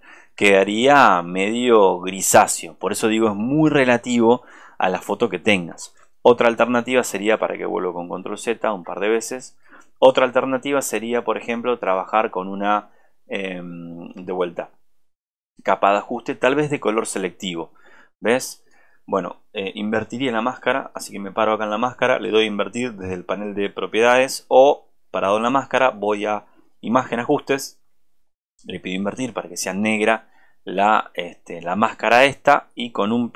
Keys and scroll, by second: 6.6 ctrl+z.